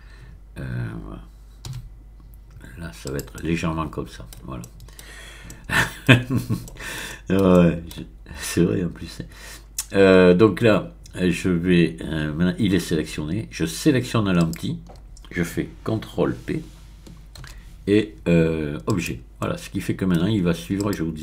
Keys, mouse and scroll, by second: 1.6 middle click, 1.7 r, 3.0 click, 3.3-4.6 middle drag, 5.0 middle click, 6.1 shift+middle click, 6.3-7.0 scroll up 3, 7.2 middle click, 7.5 shift+middle click, 14.4 shift+click, 17.4 ctrl+p, 18.8 click, 19.4-20.5 middle drag, 20.7 click.